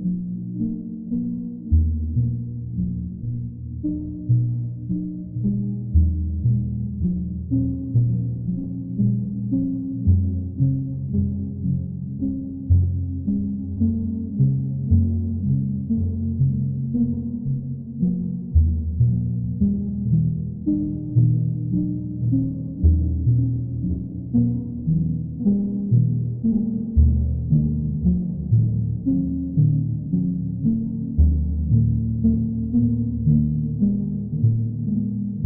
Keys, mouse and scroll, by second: 1.5 click, 1.9 shift+click, 5.1 q, 6.3 right click, 8.6-9.7 drag, 10.9 right click, 11.8-12.8 drag, 15.2 click, 15.5 ctrl+z, 17.5 right click, 20.1 click, 21.1 click, 24.1 click, 24.3 ctrl+z, 26.0 right click, 27.0 click, 31.5 click, 32.6 right click, 33.4 click.